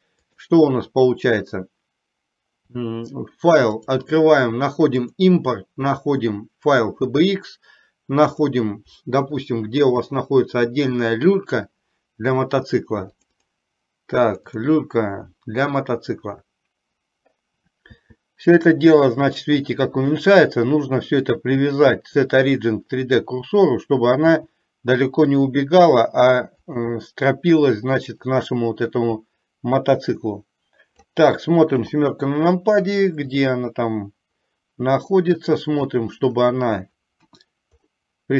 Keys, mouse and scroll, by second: 0.4 click, 1.1 n, 3.8-7.4 drag, 18.0 s, 21.3-23.5 drag, 24.3 s, 28.3 click, 29.4-31.3 drag, 31.9 KP_7, 33.3-36.1 drag, 37.4 KP_1.